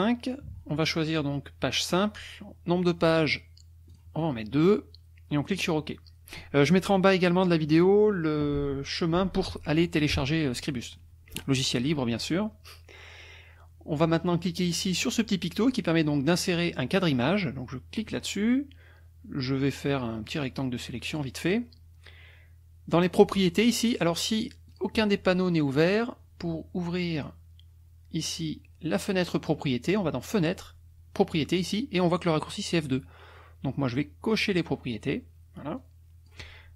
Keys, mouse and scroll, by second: 1.8 click, 3.9 click, 5.5 click, 18.0 click, 20.3 click, 23.1-24.1 drag, 24.7 click, 26.0 click, 27.2 click, 34.4 click, 35.8 click.